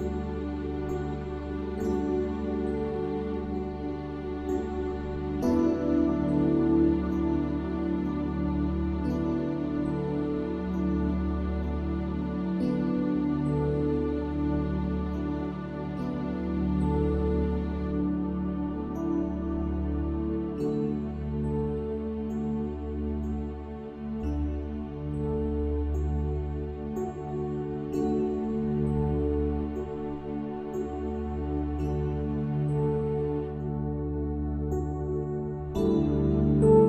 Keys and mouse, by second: 29.6 click, 32.3 click.